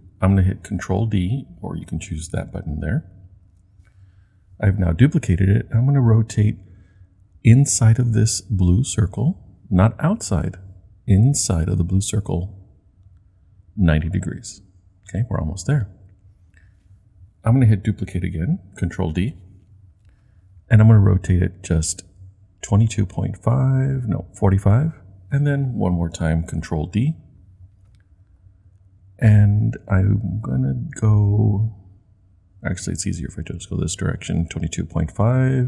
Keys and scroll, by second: 3.4 super+d, 19.1 super+d, 26.9 super+d.